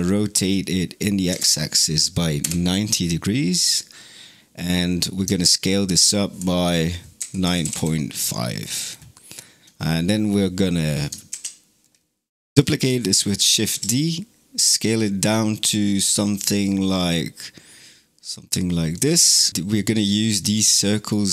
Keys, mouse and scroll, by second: 5.3-8.4 alt+drag, 8.4-9.0 scroll down 8, 9.1 scroll up 1, 11.1 shift+d, 13.5 s, 19.3 middle drag, 19.5 scroll down 4, 19.9 click, 21.1-21.3 middle drag.